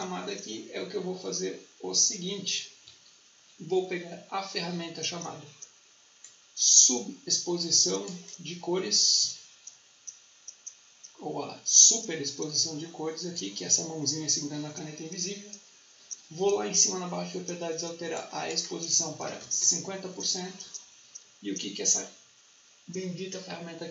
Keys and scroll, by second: 18.9-19.8 typing.